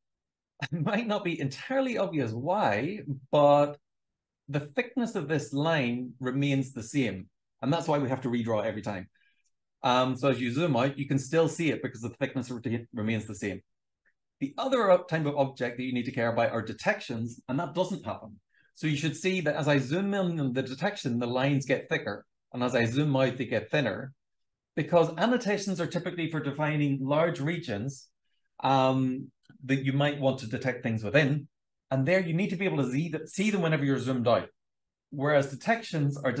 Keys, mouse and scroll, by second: 3.3-6.4 scroll up 1, 6.4-13.5 scroll down 2, 13.5-17.5 scroll up 2, 17.5-18.6 scroll up 1, 18.6-21.9 scroll up 1, 21.9-23.8 scroll down 2, 23.8-28.9 scroll down 1, 28.9-34.0 scroll down 1, 34.0-36.4 scroll down 1.